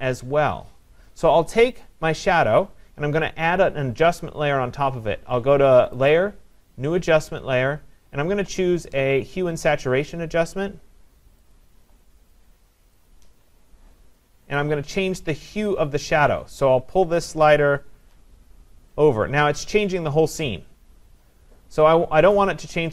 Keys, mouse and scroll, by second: 6.1 click, 11.5 click, 13.1 click, 17.9 click, 22.3-22.9 drag.